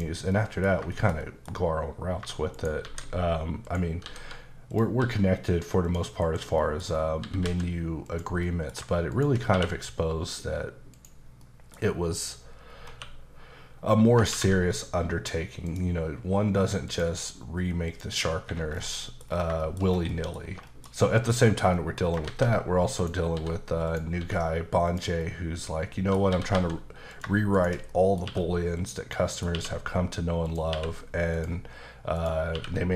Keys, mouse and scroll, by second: 0.3 middle click, 0.9 shift+middle click, 2.0 scroll up 1, 2.5 shift+right click, 2.8 shift+a, 3.7 click, 4.0 s, 4.7 click, 5.0 s, 5.9 click, 6.2-7.4 typing, 6.6 middle click, 6.9-7.2 scroll down 2, 8.0 click, 8.4 middle click, 9.1 shift+click, 9.5 q, 10.9 click, 11.4 middle click, 12.2 click, 12.7 scroll up 2, 12.9 q, 15.7 click, 16.8 click, 17.9 click, 18.4 Escape, 18.7-19.0 scroll down 2, 19.0 middle click, 19.2-20.1 scroll down 5, 19.6 shift+middle click, 20.1 middle click, 20.4-21.0 scroll down 3, 21.0 middle click, 21.4 scroll up 2, 21.7 middle click, 22.0 scroll up 2, 22.2 shift+a, 23.0 click, 23.8 click, 24.2 s, 24.9 click, 25.2 middle click, 26.3 typing, 27.1 click, 27.5 shift+click, 27.9 middle click, 28.2 q, 28.7 click, 29.1 middle click, 29.5 q, 30.4 click, 30.7 q, 31.3 click, 31.8-32.1 scroll down 1, 32.1 click, 32.5 q.